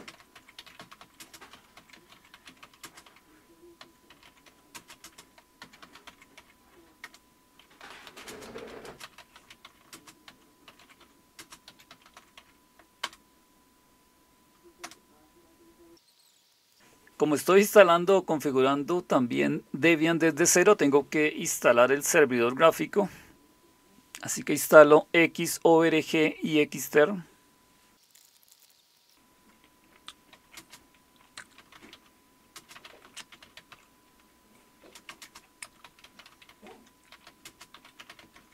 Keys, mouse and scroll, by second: 0.0-13.0 typing, 14.8 typing, 28.9-38.5 typing.